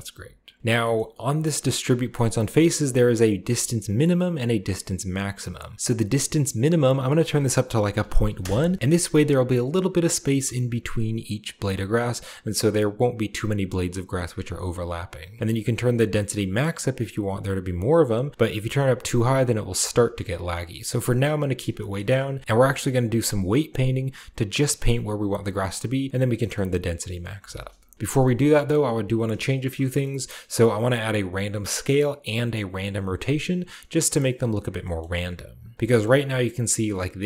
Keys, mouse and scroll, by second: 0.5 scroll down 1, 0.6-1.6 scroll up 1, 0.6 a, 0.8-1.8 middle drag, 1.6-3.5 drag, 1.6-3.5 scroll up 1, 2.1 typing, 6.6-8.1 drag, 7.8-8.1 typing, 8.2 Return, 8.7-9.5 scroll down 1, 9.6-13.6 scroll up 1, 13.6 scroll down 1, 14.2-15.3 scroll up 1, 15.4-16.5 drag, 17.0 click, 17.6 click, 18.3 click, 18.8 scroll down 1, 19.4 scroll down 1, 19.8 scroll up 1, 21.4-22.4 scroll down 3, 21.6 shift+middle click, 25.0-26.1 drag, 26.4-27.5 middle drag, 27.6-28.2 scroll down 2, 27.9 shift+middle drag, 28.2-29.0 shift+scroll up 2, 28.3-29.7 shift+middle drag, 29.9 middle drag, 30.2-31.4 middle drag, 34.5-34.9 scroll down 2, 34.9 middle click, 35.6-37.2 scroll up 2, 35.9 shift+middle drag, 36.3-37.2 shift+middle drag.